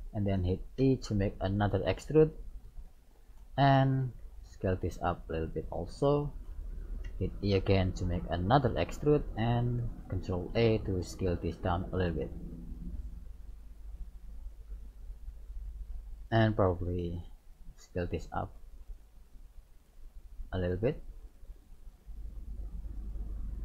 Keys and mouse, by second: 0.9 e, 4.1 ctrl+a, 7.2 e, 10.4 ctrl+a, 12.5-14.8 middle drag, 16.2 right click, 17.2 ctrl+a, 18.9 right click, 19.9 ctrl+a, 22.3 middle click.